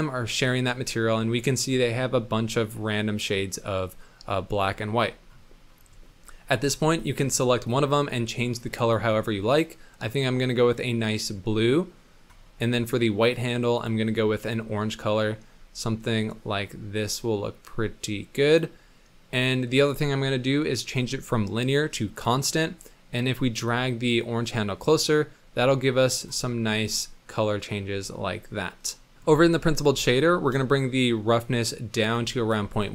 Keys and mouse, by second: 0.7 drag, 1.3 middle drag, 1.7-4.5 middle drag, 6.0 middle click, 6.9 click, 7.6 click, 13.2 click, 19.8-22.4 drag, 23.7-26.2 drag, 26.6-29.1 middle drag, 30.2-32.0 ctrl+drag, 32.5 middle drag.